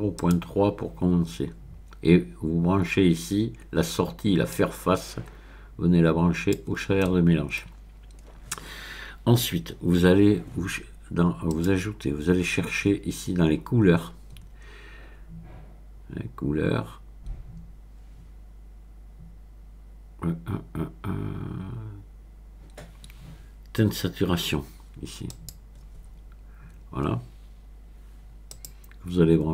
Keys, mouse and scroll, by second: 0.2 click, 4.5-6.9 drag, 7.0 middle click, 7.7-8.7 scroll down 1, 11.5 click, 25.3 click, 28.5 click.